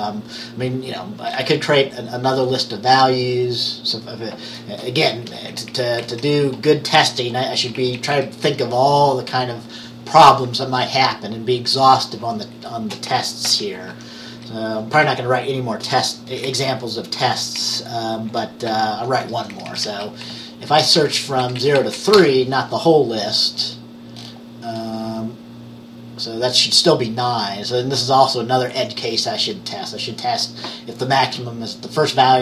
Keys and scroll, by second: 5.7 Up, 6.1 Right, 7.7 shift+Down, 7.9 shift+Down, 8.1 shift+Down, 8.2 shift+Down, 13.5 ctrl+c, 14.0 Down, 14.4 Up, 15.0 Return, 16.4 Left, 16.5 Left, 17.7 Down, 18.8 ctrl+v, 19.3 Up, 19.5 Up, 19.6 Up, 19.8 Up, 20.4 Right, 20.9 Right, 22.3 BackSpace, 22.4 3.